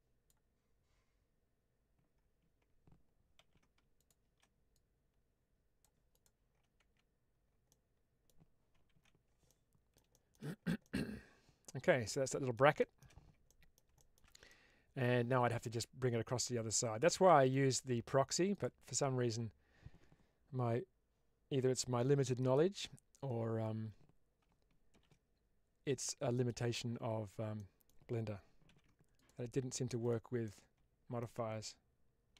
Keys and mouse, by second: 3.3 ctrl+z, 4.7-5.7 drag, 6.0 click, 6.7 Tab, 7.6-8.2 middle drag, 8.8 alt+z, 9.3-9.9 middle drag, 10.1 middle click, 10.7-12.5 middle drag, 12.8 shift+middle drag, 13.4-13.7 middle drag, 14.0 shift+middle drag, 14.4-17.5 middle drag, 18.4 click, 22.3 right click, 24.8 shift+d, 26.3 right click, 27.5 middle click, 28.7 ctrl+z, 29.0 click, 29.9 click, 30.4-31.1 middle drag.